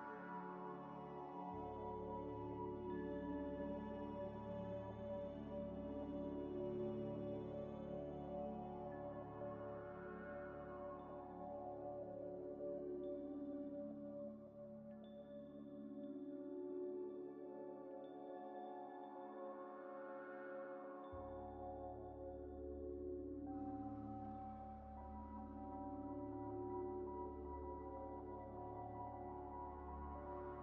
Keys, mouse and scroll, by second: 0.1 Tab, 0.6-2.9 typing, 4.0 scroll up 1, 6.0 g, 7.3 scroll up 1, 7.7 scroll down 1, 7.9-8.3 scroll up 1, 8.3 u, 10.2 u, 11.6 g, 12.5 scroll up 1, 14.4 s, 14.5 x, 14.7 s, 15.8-18.6 typing, 19.4 Tab, 20.3 Tab, 20.8 a, 22.1 u, 23.0 scroll down 1, 23.5 scroll up 1, 23.7 g, 24.4 scroll up 1, 24.9 s, 25.6 y, 26.6 s, 27.1 g, 27.8 s, 29.2 Tab, 29.7 Tab, 29.7 Tab, 29.9 a.